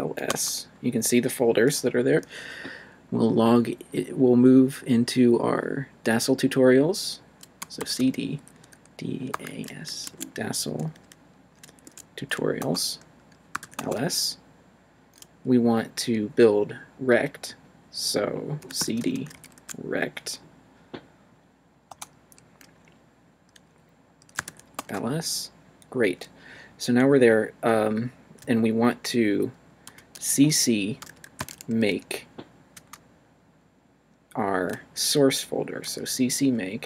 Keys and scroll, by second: 0.3 Return, 7.4-9.5 typing, 10.0 Tab, 11.6 t, 11.8 Tab, 12.6 Return, 13.3-14.1 typing, 18.4-19.8 typing, 21.9 Return, 24.1-25.0 typing, 29.9-32.7 typing, 35.9 s.